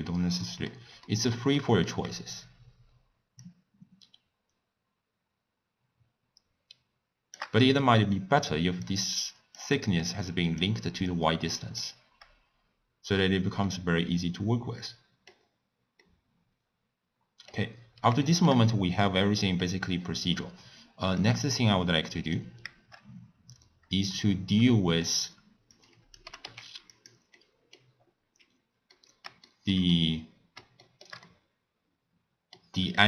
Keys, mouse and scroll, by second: 3.7-6.7 shift+drag, 12.1-13.7 drag, 13.7-15.5 middle drag, 15.5-16.0 scroll down 1, 16.0-17.6 middle drag, 17.6-18.2 scroll down 3, 18.2-18.6 shift+middle drag, 18.6-19.1 scroll down 1, 19.1-28.5 middle drag, 28.5-28.9 scroll up 3, 28.9-29.8 middle drag, 29.8 scroll down 1, 29.9-33.0 middle drag.